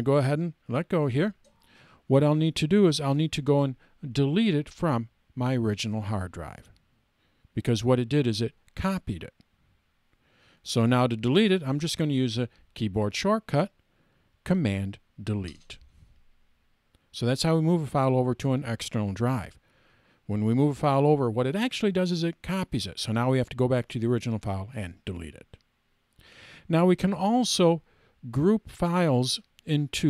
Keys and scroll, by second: 15.4 super+BackSpace.